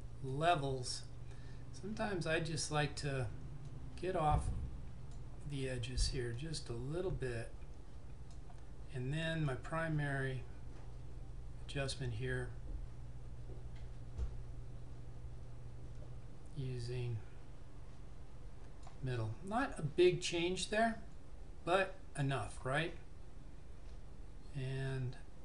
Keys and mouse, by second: 2.4 click, 3.7 click, 20.3 click, 21.3 typing.